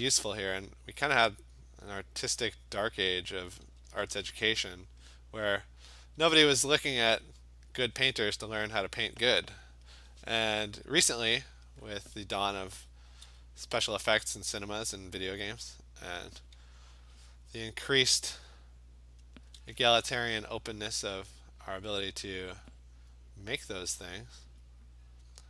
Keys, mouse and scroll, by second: 0.0 ], 1.3 click, 2.9 click, 3.4 alt+click, 3.7 [, 3.9 [, 4.2 [, 4.3 [, 5.0 click, 5.9 click, 6.1 alt+click, 6.5 alt+click, 7.3 click, 9.9 click, 11.2 alt+click, 11.7 click, 12.7 click, 12.8 alt+click, 13.1 [, 13.6 [, 13.9 [, 15.4 click, 16.2 click, 16.7 click, 19.2 click, 22.0 click, 22.6 alt+click, 24.5 click, 24.9 click, 25.2 click.